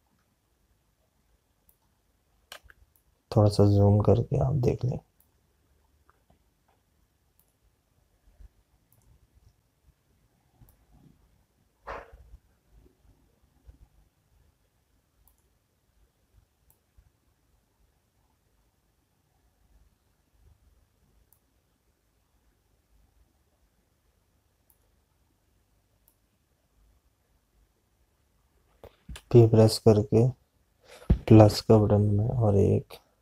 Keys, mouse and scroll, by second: 2.6 click, 22.9 click, 30.1 p.